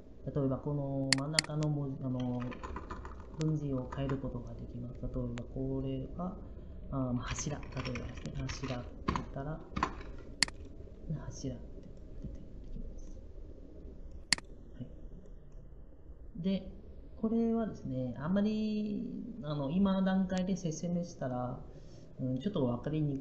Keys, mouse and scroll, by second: 2.4 BackSpace, 6.9-8.3 typing.